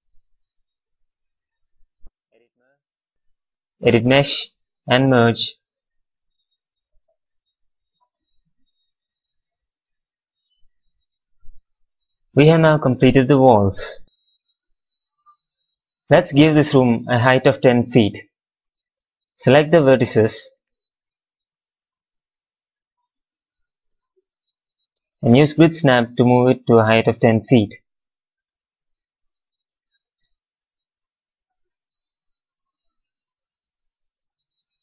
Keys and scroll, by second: 5.6 q, 20.5 space, 23.7 space, 24.7 w, 34.1 x.